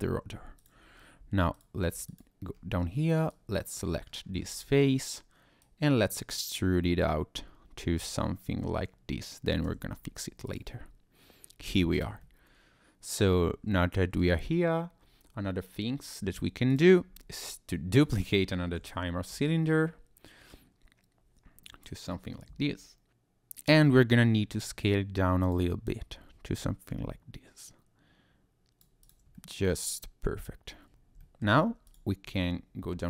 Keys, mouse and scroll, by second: 0.6 click, 1.5 alt+click, 2.1 click, 2.5-3.1 scroll up 3, 3.3 click, 4.1 scroll down 2, 4.2 scroll up 1, 4.4-4.8 scroll down 2, 5.6 click, 9.6 Tab, 10.5 click, 11.7 click, 11.9 click, 12.2 middle click, 16.7 click, 17.9 click, 18.8 shift+d, 19.3 Escape, 20.5 click, 23.7 s, 25.4 click, 25.9 click, 29.0 click, 29.3 middle click, 30.9 scroll up 1, 31.2 shift+middle click, 31.5 scroll down 1, 31.5 scroll up 1, 31.9 click, 32.2 Tab.